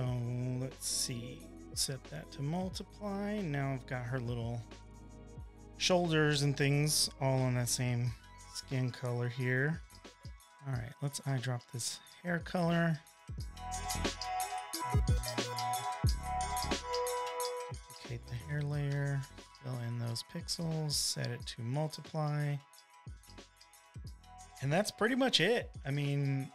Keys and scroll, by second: 5.4 v, 5.5 space, 6.0 space, 6.1 space, 7.7 e, 10.5 ], 11.9 i, 19.7 super+j, 21.3 alt+shift+BackSpace, 22.7 v.